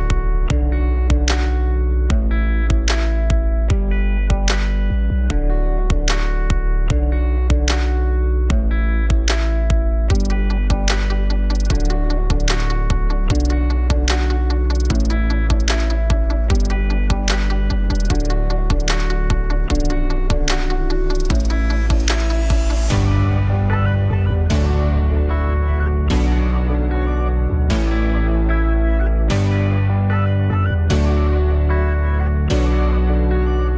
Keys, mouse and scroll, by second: 1.2-3.8 drag, 5.3 click, 6.1 KP_0, 7.4-10.0 shift+drag, 15.7-18.3 drag, 19.9-22.5 shift+drag, 24.2-31.5 drag, 31.8-33.7 drag.